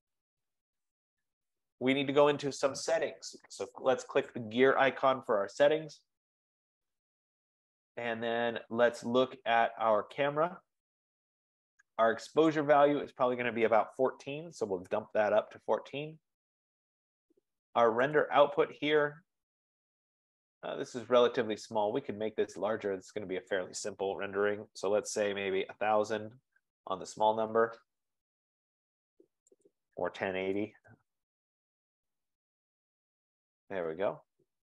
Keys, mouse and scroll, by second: 0.0 click, 5.5 click, 10.2 click, 12.6 click, 13.6 click, 14.1-14.7 typing, 14.9-19.0 Tab, 18.2 click, 19.0-19.7 scroll down 6, 20.2 F15, 21.3-21.7 scroll, 23.7 click, 25.4-26.3 typing, 26.6 Tab, 27.2 Tab, 29.7 click, 30.6-33.1 BackSpace, 30.9 8, 32.8 click.